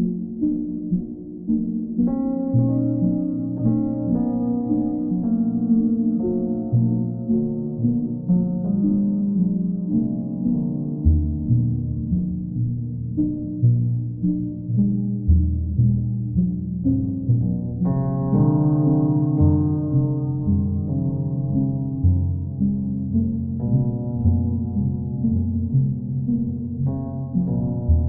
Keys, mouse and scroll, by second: 1.5 click, 2.4 alt+click, 3.8-4.8 right drag, 5.7-6.8 drag, 8.5-10.0 drag, 11.8 click, 12.2 shift+click, 13.3 alt+click, 15.5 click, 15.8 shift+click, 17.0 alt+click, 19.4 click, 19.7 shift+click, 20.4 alt+click, 21.1 alt+click, 23.1 click, 23.5 shift+click, 24.2 alt+click, 25.2 alt+click, 27.2 alt+click, 27.8 alt+click.